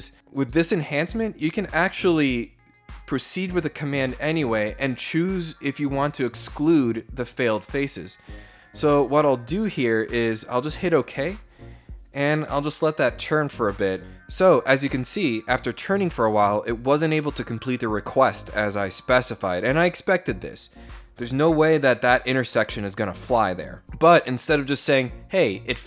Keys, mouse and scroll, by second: 10.4 click.